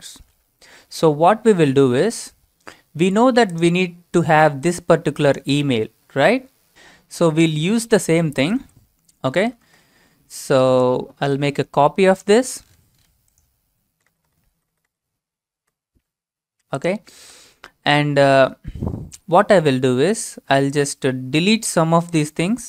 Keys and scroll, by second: 8.6 alt+Tab, 9.4 alt+Tab, 9.6 alt+Tab, 12.3 ctrl+c, 13.9 Return, 14.1 Return, 14.3 Return, 14.4 Return, 14.6 Return, 14.8 Return, 14.9 Return, 15.1 Return, 15.6 Return, 17.2 ctrl+v.